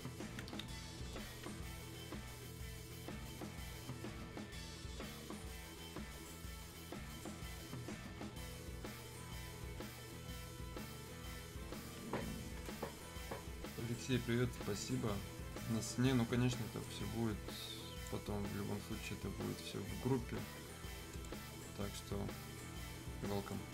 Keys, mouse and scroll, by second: 16.8-19.4 drag, 19.4-20.3 scroll up 1, 21.1 click, 21.7-22.3 scroll down 1, 23.5-23.7 drag.